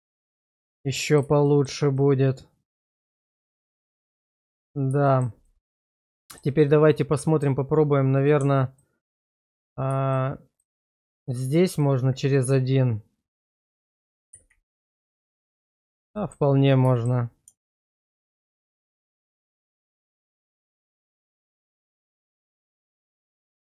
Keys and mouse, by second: 1.4 shift+middle click, 2.0-4.0 middle drag, 4.2 shift+middle click, 4.5 Tab, 5.1 middle click, 5.5 middle click, 6.2 middle click, 6.7 middle click, 10.5 alt+shift+click, 11.2 alt+shift+click, 12.3-13.4 middle drag, 14.3 ctrl+x, 15.3 middle click, 16.2 shift+middle click, 16.9 shift+middle click, 17.6 alt+click, 18.7 alt+shift+click, 19.2 alt+shift+click, 19.7 alt+shift+click, 21.3 ctrl+x, 22.1 shift+middle click, 22.5 shift+middle click, 22.8 middle click, 23.5 shift+middle click.